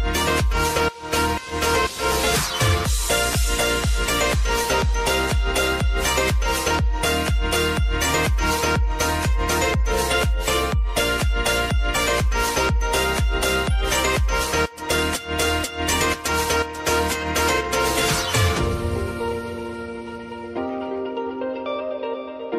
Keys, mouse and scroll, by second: 4.1 -, 7.0 s, 7.4-15.9 drag, 17.3 `, 19.3 click.